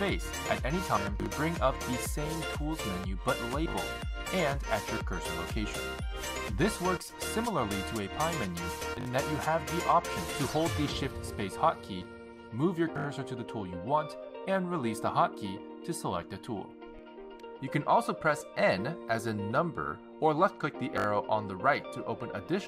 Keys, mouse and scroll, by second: 0.0 shift+space, 3.5 shift+space, 8.6 shift+space, 12.9 shift+space, 15.3 shift+space, 18.6 shift+space, 20.6 n, 22.2 n.